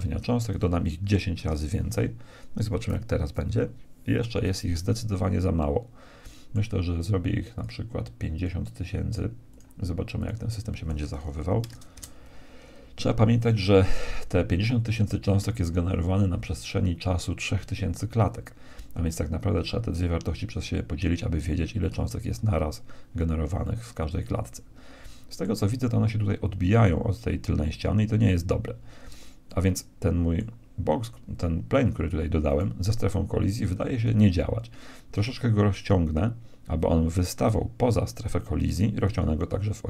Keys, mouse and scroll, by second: 1.0 click, 5.5-7.2 middle drag, 7.6-9.4 drag, 23.5-25.4 middle drag, 29.5-32.5 middle drag, 32.5-34.0 right drag, 34.0-35.4 middle drag, 35.6 s, 38.6 s.